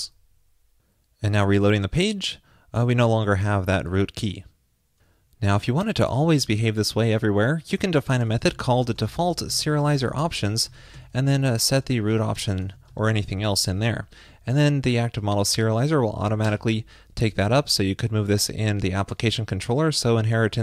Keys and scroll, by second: 14.7 super+Right, 15.3 alt+shift+Left, 18.5 shift+super+Left.